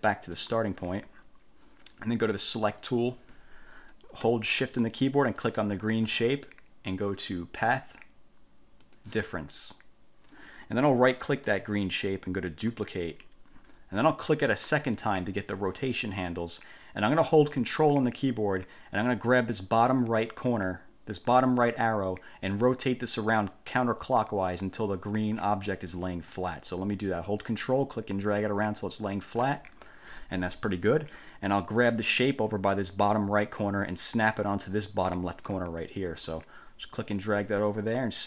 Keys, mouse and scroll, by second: 0.5 click, 2.9 click, 5.5 shift+click, 7.7 click, 9.0 click, 11.6 click, 12.9 click, 14.9 click, 27.6-29.7 ctrl+drag, 36.5-38.2 drag.